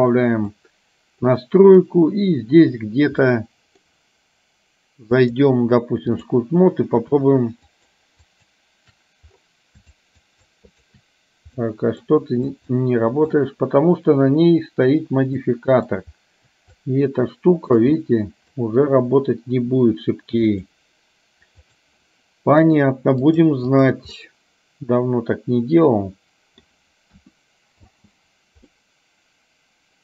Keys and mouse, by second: 0.6 click, 3.4 middle click, 5.2-6.4 drag, 7.7 shift+click, 8.4 shift+click, 10.0 shift+click, 10.6 shift+click, 11.7 middle click, 12.9 shift+click, 15.5 middle click, 16.9 shift+click, 18.1 middle click, 20.5 click, 23.5 click, 24.2-26.9 middle drag, 27.2 KP_1, 28.0 space, 28.9-30.0 middle drag.